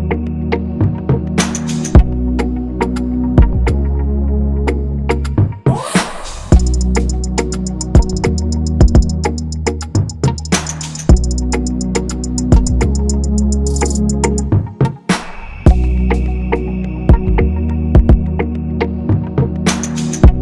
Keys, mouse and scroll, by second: 5.1 double click, 8.0 typing.